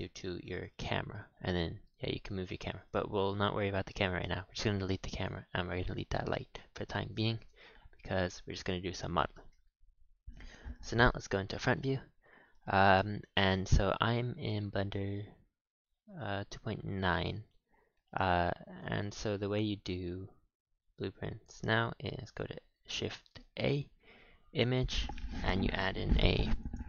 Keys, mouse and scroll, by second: 0.3 click, 0.5 click, 0.7 click, 1.0 g, 2.7-3.0 scroll up 7, 3.0 scroll down 5, 3.3-3.8 middle drag, 3.8 scroll down 1, 4.0-4.3 shift+middle drag, 4.3 x, 5.1 click, 5.5 x, 6.1-8.8 middle drag, 8.8-9.1 scroll up 4, 9.1-10.6 middle drag, 10.6 KP_1, 11.7-12.2 scroll down 1, 12.2-12.6 scroll up 4, 12.6-15.7 shift+middle drag, 18.1 click, 18.6 click, 19.1 shift+a, 23.4 shift+a.